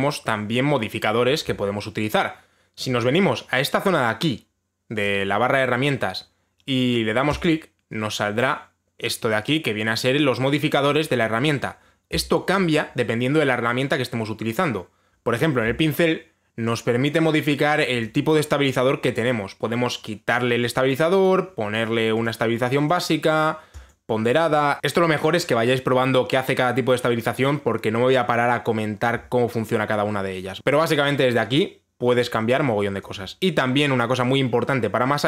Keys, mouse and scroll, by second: 8.0 click, 18.7 click, 21.3 click, 21.9 click, 22.8 click, 23.5 click, 24.5 click, 33.6 click.